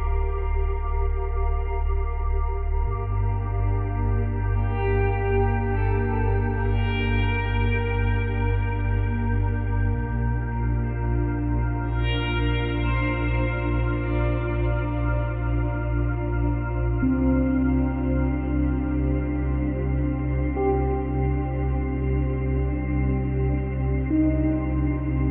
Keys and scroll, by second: 6.8 Delete, 20.5 Delete.